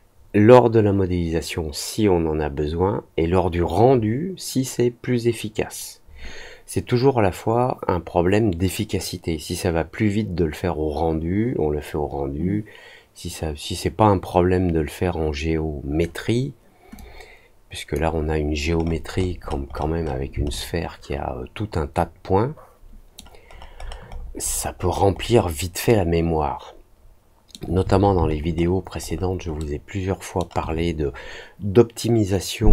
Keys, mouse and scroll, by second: 16.9 click, 18.8 middle click, 18.8-20.1 scroll up 5, 19.0 middle click, 19.3 middle click, 19.6 middle click, 19.9 middle click, 20.4-23.1 alt+middle drag, 23.4-25.3 alt+scroll down 6, 25.8-27.4 alt+middle drag, 28.2-29.5 alt+scroll up 3, 29.4 alt+middle click.